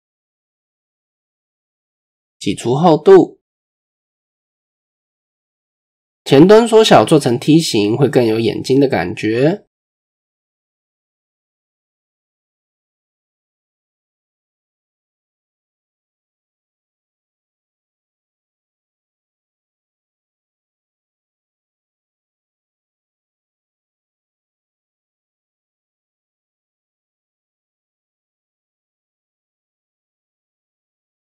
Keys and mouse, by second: 1.1 KP_3, 4.2 e, 7.6 s, 9.1-9.5 middle drag, 9.8-10.2 middle drag, 10.4 middle click, 10.9-11.4 middle drag, 11.7 middle click, 12.7 KP_1, 13.1 KP_3, 13.6 a, 14.7-15.2 drag, 16.2-17.0 drag, 17.5-18.0 drag, 18.8 h, 20.0 a, 20.9-22.7 drag, 23.8-24.2 shift+drag, 24.6-25.2 drag, 25.8 r, 27.4 KP_7, 28.4-28.7 shift+drag, 29.5-30.1 drag, 30.7 r.